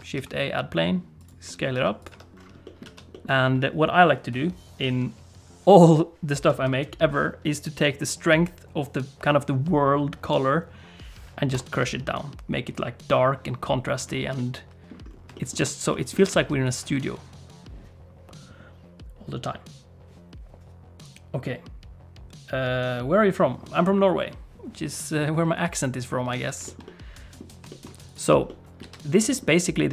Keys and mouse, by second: 0.1 s, 1.7 s, 2.1 Tab, 2.6 middle click, 2.8 alt+a, 3.1 middle click, 11.5 BackSpace, 14.3 middle click, 15.3 shift+middle click, 15.9 middle click, 16.2 alt+a, 26.3 alt+a, 26.6 shift+middle click, 26.8 middle click, 27.7 shift+middle click, 28.0 click, 28.4 middle click, 28.8 alt+a, 29.2 middle click.